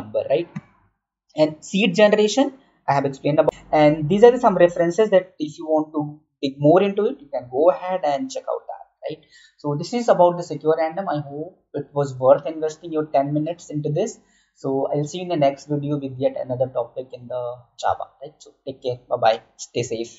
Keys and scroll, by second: 0.5 Right, 3.4 Right.